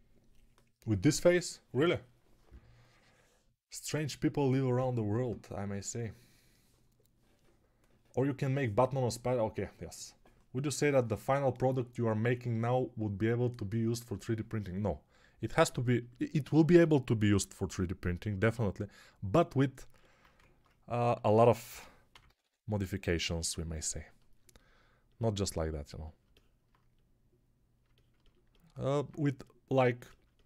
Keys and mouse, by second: 17.2 alt+q, 20.3 ctrl+Tab, 21.6 g, 22.0 ], 22.1 ], 22.3 ], 25.0-30.4 drag.